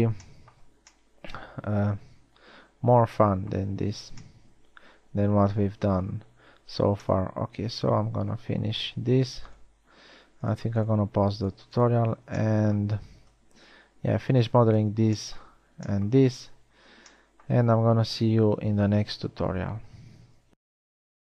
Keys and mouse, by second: 1.5 middle click, 4.1 middle drag.